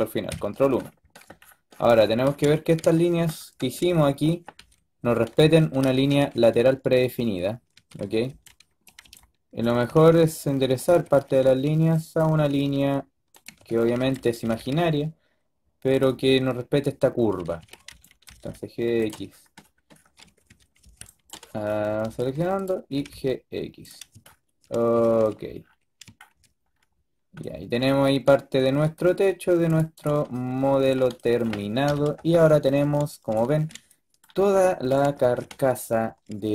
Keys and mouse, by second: 4.2 a, 4.5 a, 6.2 a, 7.7-9.8 typing, 10.8 a, 11.1 a, 11.3 a, 11.3 b, 12.4-14.3 typing, 17.4-18.1 typing, 20.1 a, 20.4 a, 20.7 a, 20.7 b, 21.9 ctrl+b, 22.9 g, 24.9 a, 25.1 a, 29.6-31.8 drag, 31.8 KP_5.